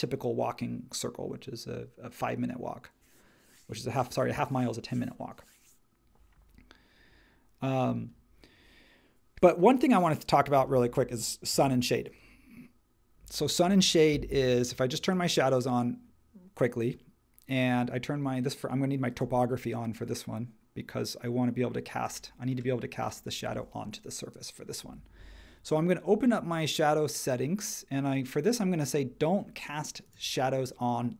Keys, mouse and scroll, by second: 10.5 space, 11.5 super+1.